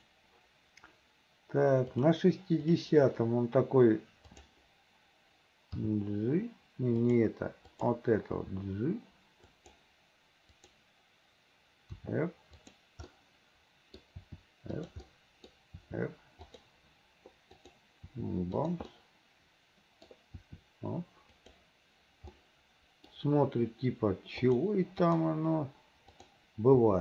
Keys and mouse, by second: 0.0 click, 2.1 click, 2.8 click, 4.4 click, 5.9 g, 7.9 click, 8.5 g, 10.7 click, 12.1 r, 13.4 click, 14.3 r, 15.3 click, 15.9 r, 17.7 click, 18.2 r, 19.1-20.2 middle drag, 20.5 r, 22.5 middle click, 25.1 click, 26.3 click, 26.9 r.